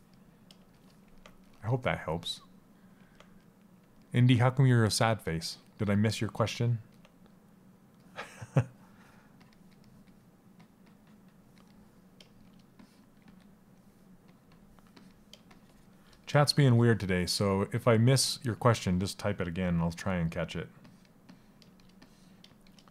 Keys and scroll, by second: 12.8 s, 22.6 s.